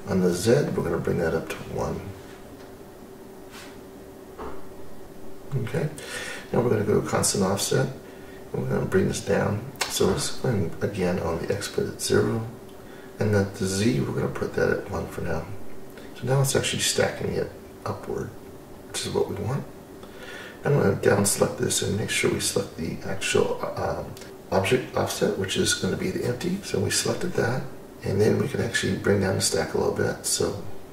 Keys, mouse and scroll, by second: 2.5-5.0 drag, 6.8 click, 7.5 click, 8.8-11.5 drag, 11.7-14.9 drag, 14.9-15.3 scroll up 1, 15.3-16.2 scroll down 9, 16.1 scroll up 2, 17.3 click, 20.0 click, 22.6 click.